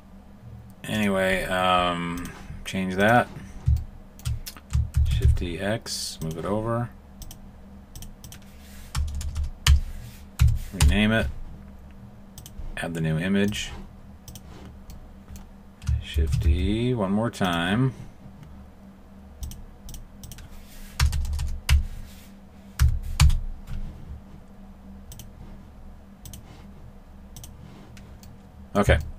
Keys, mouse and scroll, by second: 0.9 click, 3.0 click, 3.7 shift+middle click, 4.9 shift+d, 7.2 click, 7.9 click, 9.1 BackSpace, 9.2 BackSpace, 9.6 BackSpace, 12.3 click, 14.3 click, 14.9 middle click, 16.1 shift+d, 19.4 click, 19.9 click, 21.1 BackSpace, 21.2 BackSpace, 21.6 BackSpace, 25.1 click, 27.4 click, 28.3 middle click, 29.0 shift+middle click.